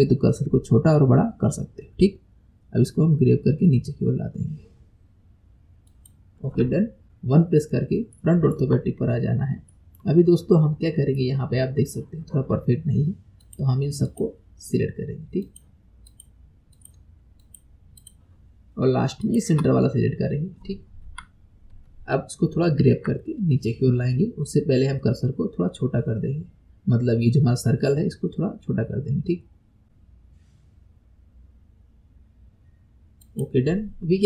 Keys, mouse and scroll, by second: 7.0-8.1 scroll up 6, 8.2 shift+middle click, 9.1-9.7 scroll up 2, 9.7-10.8 shift+middle drag, 10.8-11.2 scroll down 3, 11.2-13.4 middle drag, 13.4 click, 14.1 shift+click, 15.4 shift+click, 16.1 shift+click, 16.7 shift+click, 17.4 shift+click, 18.0 shift+click, 19.2 shift+click, 21.1 KP_1, 33.8-34.2 scroll up 3.